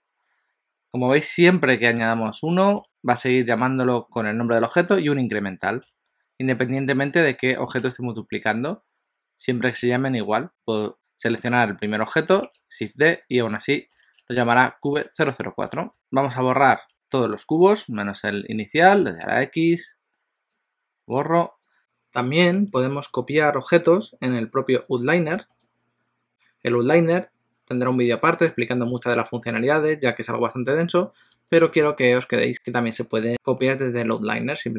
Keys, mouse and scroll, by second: 10.5 click, 12.5 shift+d, 16.8 click, 17.5 shift+click, 18.3 shift+click, 19.1 x, 21.8 click, 34.5 click.